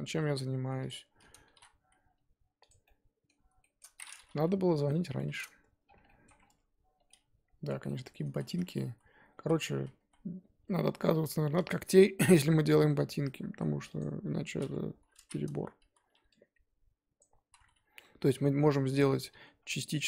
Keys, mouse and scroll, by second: 0.1 g, 0.9 middle click, 1.5 s, 2.8-4.6 middle drag, 4.6 KP_3, 5.3-5.8 scroll up 2, 5.8 scroll down 1, 6.0 middle click, 6.3 scroll up 1, 6.4 scroll down 1, 6.5 Tab, 7.1-8.3 middle drag, 8.3 ctrl+z, 8.4 ctrl+z, 8.6 ctrl+z, 8.8 ctrl+z, 9.1 ctrl+z, 9.3 ctrl+z, 9.7 ctrl+z, 10.0 ctrl+z, 10.6 Tab, 11.7 click, 12.1-14.0 middle drag, 14.0 click, 14.0-14.9 scroll up 2, 14.9 KP_3, 15.3-15.6 scroll up 2, 15.6 Tab, 15.9 z, 17.2 click, 17.5 z, 18.0 g, 19.1 Tab, 19.4 z, 19.7 middle click.